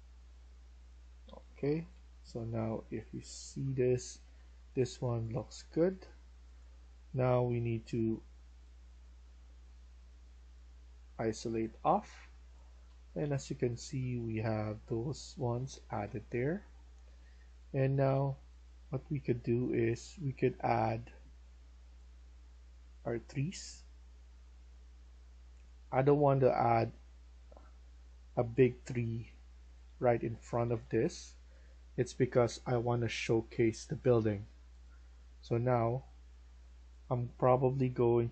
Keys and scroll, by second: 0.8-3.5 typing, 4.1 Escape, 4.3 Escape, 10.6-14.9 typing, 15.4 Escape, 16.0-19.5 typing, 25.5-26.9 typing, 28.3-30.7 typing, 36.7-38.3 typing.